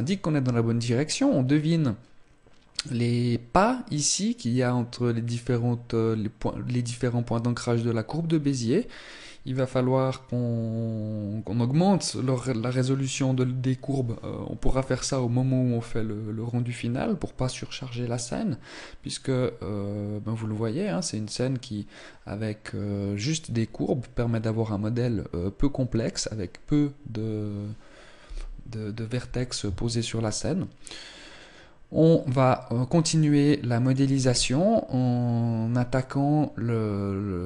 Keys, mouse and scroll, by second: 33.7 click.